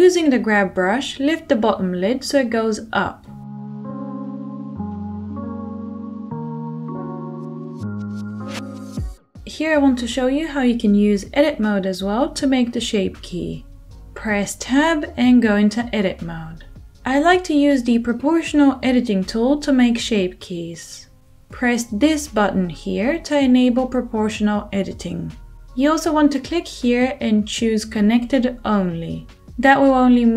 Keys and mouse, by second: 4.9 ctrl+z, 5.3 f, 5.7 middle click, 6.2-22.3 drag, 13.3 Tab, 20.5 2, 22.2-25.2 middle drag, 25.2-30.3 drag.